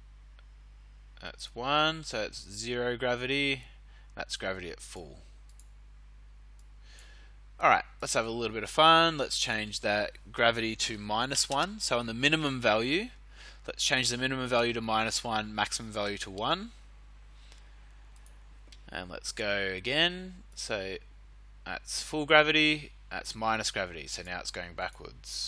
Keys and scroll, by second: 10.8 -, 11.3 1, 11.5 Return.